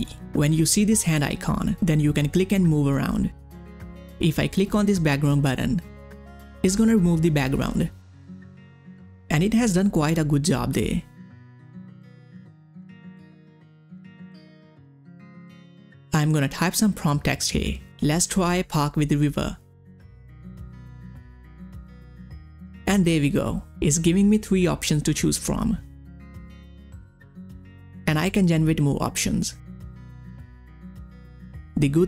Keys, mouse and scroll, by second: 0.9 space, 1.6 space, 2.6 space, 5.6 space, 5.7 click, 8.2 click, 8.6-8.9 ctrl+scroll up 1, 9.8 space, 9.9 click, 10.3 space, 12.7 space, 13.0 ctrl+scroll down 1, 13.3 space, 13.3 click, 13.7 ctrl+scroll down 1, 14.0 space, 14.1 click, 14.3 space, 15.6 click, 17.7-20.1 typing, 20.6 click, 24.5 click, 28.3 click.